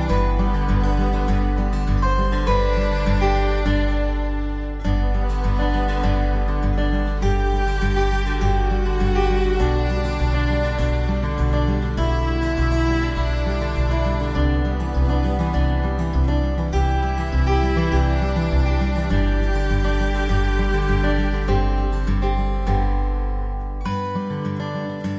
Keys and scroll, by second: 4.1 alt+Num_Lock, 7.3 v, 9.1 v, 9.2 ctrl+t, 13.8-14.5 typing, 13.9 ctrl+], 14.4 ctrl+=, 19.4-21.4 typing.